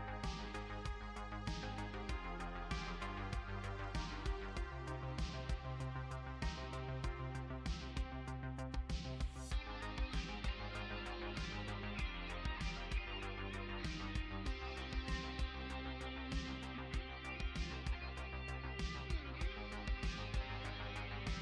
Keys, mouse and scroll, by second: 17.4 click, 18.2 middle click, 20.5 middle click.